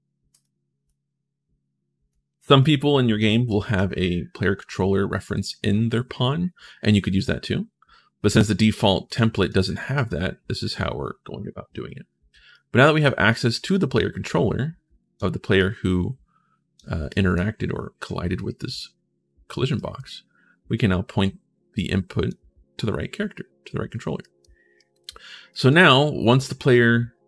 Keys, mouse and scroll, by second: 0.1 click, 0.6-1.9 drag, 2.4 click, 3.3 right click, 8.0 right click, 8.8 click, 9.2 click, 9.7 right click, 12.3 right click, 13.3-14.9 drag, 15.4-16.5 drag, 16.9 right click, 19.5 right click, 21.6 click, 24.0 right click, 24.5 right click, 25.3 right click, 27.1 click, 27.1 right click.